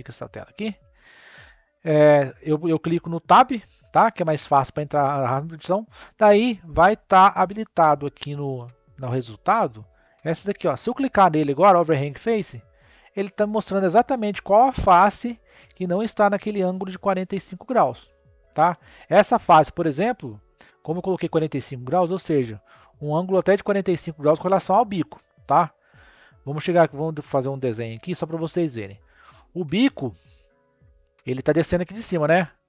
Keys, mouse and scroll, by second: 2.8 Tab, 3.4 Tab, 12.1-13.4 drag, 13.4 scroll up 1, 13.6-16.7 middle drag, 18.9-22.1 middle drag, 23.3-26.4 middle drag.